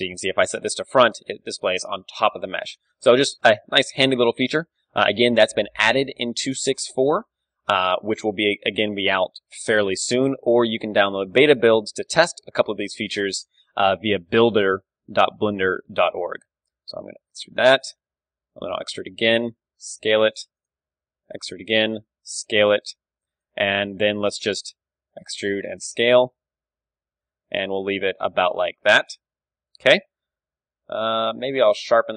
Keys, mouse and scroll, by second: 0.7-4.4 drag, 4.4 middle click, 5.2-7.7 middle drag, 6.6 g, 8.1-10.0 drag, 8.2 s, 11.1-13.6 drag, 11.1 KP_7, 14.4 s, 15.7-17.9 drag, 18.3 e, 19.5-20.9 drag, 19.6 s, 20.9 e, 21.9 s, 24.1 KP_1, 24.8 e, 28.3-30.7 drag, 28.4 Tab, 28.8 KP_3, 30.5 Tab, 30.7 middle click, 30.9 a.